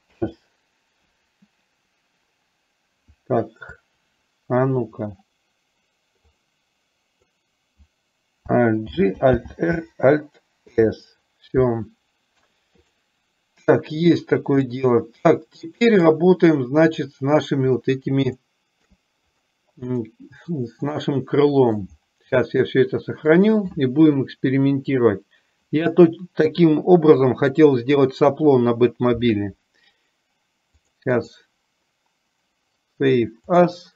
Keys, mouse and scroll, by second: 6.3-7.4 drag, 9.0 alt+g, 9.7 alt+r, 14.8-16.3 middle drag, 17.2 middle click, 18.7 shift+middle click, 20.0-22.0 shift+middle drag, 23.4-30.9 drag, 31.4-33.9 drag.